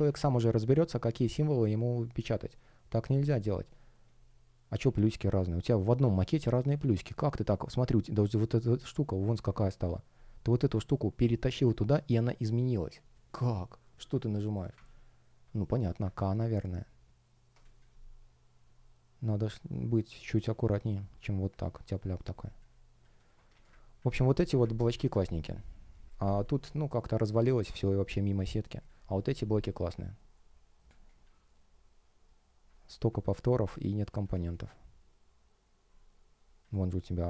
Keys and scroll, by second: 3.9 space, 5.8 shift+0, 6.1 space, 17.5 space, 26.0 space, 27.4 shift+o, 30.0 shift+o, 30.8 space.